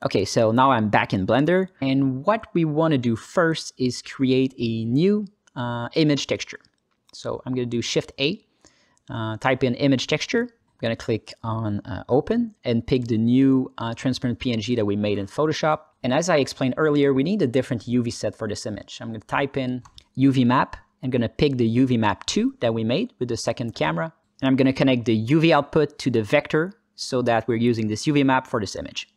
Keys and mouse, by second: 1.8 alt+shift+z, 2.6 click, 3.9 drag, 4.3 click, 4.9 ctrl+alt+middle click, 5.3 middle click, 6.1-7.2 drag, 7.5 middle click, 8.4 shift+a, 9.2 shift+a, 12.0 middle click, 12.5 click, 15.6 alt+middle click, 15.9 click, 16.2 click, 17.1 middle click, 18.0 click, 18.6 click, 19.5 shift+a, 23.0-24.1 drag, 25.0 ctrl+alt+middle click, 25.8-26.5 drag, 26.8 ctrl+alt+middle click, 27.4 click, 28.0 middle click, 28.3 click.